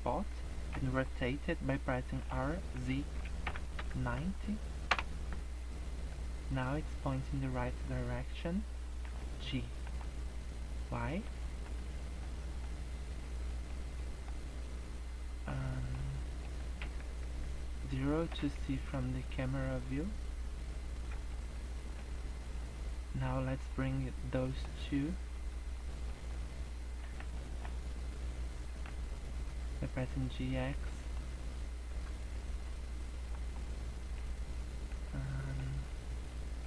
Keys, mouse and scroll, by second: 0.4-2.1 scroll down 2, 2.1 r, 5.6 middle click, 6.1-6.5 scroll up 3, 6.5 middle click, 7.4 middle click, 9.0 g, 11.4 middle click, 11.9 scroll down 3, 11.9 shift+middle click, 12.4 middle click, 13.1 scroll up 1, 13.5 shift+middle click, 13.9 middle click, 15.5 middle click, 15.5 scroll down 1, 16.1 middle click, 16.6 scroll up 1, 17.1 KP_0, 17.7-18.0 scroll up 2, 18.5 scroll down 2, 18.7-19.3 scroll up 3, 20.3-20.7 scroll down 2, 20.9 middle click, 21.3 scroll down 2, 21.5 middle click, 22.3 scroll down 1, 23.5 click, 24.5 middle click, 25.4 shift+click, 25.7 middle click, 27.0 g, 31.9 KP_0, 32.5-32.9 scroll up 6, 33.3-33.7 scroll down 10, 33.9 middle click, 34.3 scroll down 2, 34.5 middle click, 35.1 scroll down 1, 35.3 middle click, 35.8 scroll up 1, 36.2 middle click.